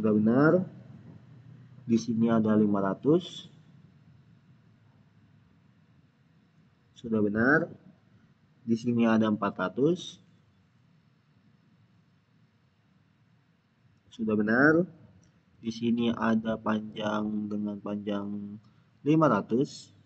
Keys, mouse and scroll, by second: 2.9 click, 10.2 click, 10.3 click, 13.8 click, 16.3 click, 19.0 click.